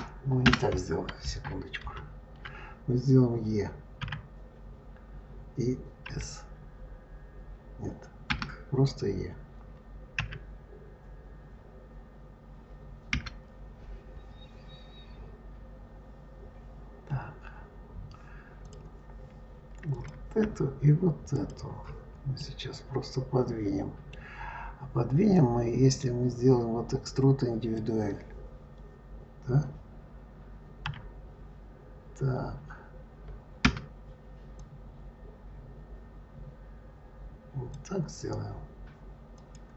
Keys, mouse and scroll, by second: 0.3 Escape, 1.7 ctrl+z, 3.9 e, 10.0 e, 18.5 click, 19.8 click, 21.2 shift+click, 22.2-25.2 middle drag, 25.2-28.2 drag, 30.7 e, 34.4 click, 39.2 click.